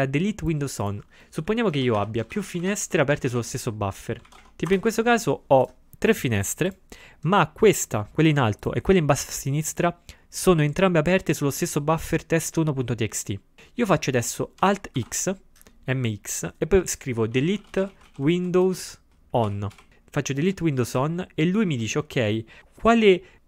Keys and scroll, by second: 1.8-3.0 typing, 15.0 alt+x, 17.1-20.2 typing.